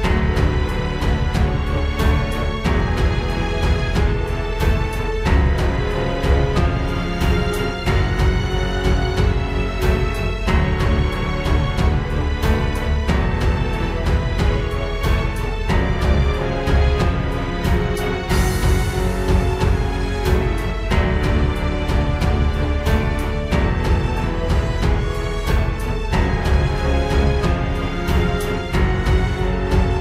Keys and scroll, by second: 0.9 ctrl+space, 2.1 ctrl+space, 3.9 ctrl+j, 4.4 ctrl+h, 4.7 ctrl+i, 5.2 ctrl+x, 5.3 ctrl+z, 8.9 ctrl+space, 9.9 ctrl+t, 16.3 ctrl+t, 17.0 ctrl+z, 17.0 ctrl+space, 17.8 ctrl+space, 20.0 ctrl+space, 21.0 ctrl+space, 23.2 ctrl+space, 25.2 ctrl+space, 25.9 ctrl+space, 28.7 ctrl+space.